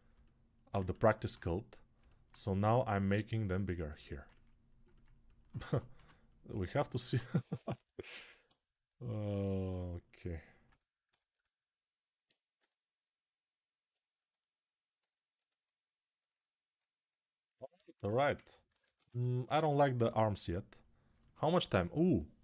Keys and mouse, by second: 0.6 alt+q, 2.0-3.3 drag, 3.3-4.9 shift+right drag, 4.9-10.9 alt+drag, 7.9 alt+q, 12.3 g, 15.0-19.0 alt+right drag, 18.5 alt+q, 19.0-22.4 alt+shift+drag, 19.8 g.